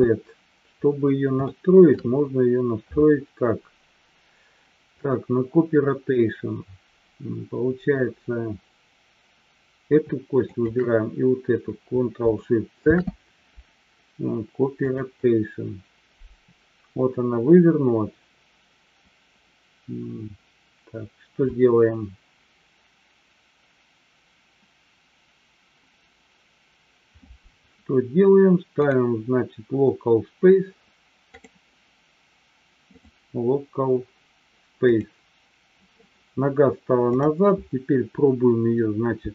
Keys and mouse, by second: 0.1 ctrl+z, 1.4-2.0 shift+middle drag, 10.5 shift+click, 12.8 ctrl+shift+c, 28.8-31.8 drag, 33.0-35.4 drag.